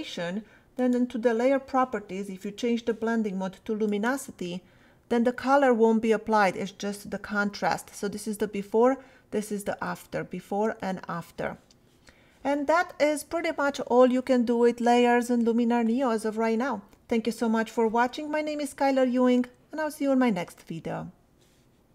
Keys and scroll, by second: 8.0 \, 10.2 \.